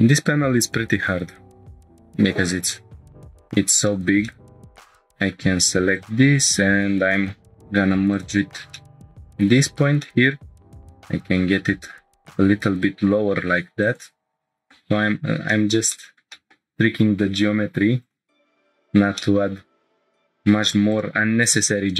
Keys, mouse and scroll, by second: 0.1 scroll up 1, 1.4 scroll up 2, 1.7 shift+middle click, 2.7 middle click, 3.1 scroll down 1, 3.4 scroll up 1, 3.9 shift+middle click, 4.2-5.3 middle drag, 4.7 click, 4.7 1, 5.9 shift+click, 7.5 m, 8.7 shift+middle click, 9.7 scroll up 1, 10.0 middle click, 10.8 click, 11.0 g, 11.2 z, 13.8 click, 14.2 scroll down 4, 14.4 shift+middle click, 15.0-15.4 scroll down 1, 15.5 middle click, 16.3 middle click, 17.3 Tab, 18.0 click, 18.5 Tab, 18.9-19.2 scroll down 2, 19.2-20.0 middle drag, 20.0 Tab, 20.9 click, 21.6 Tab.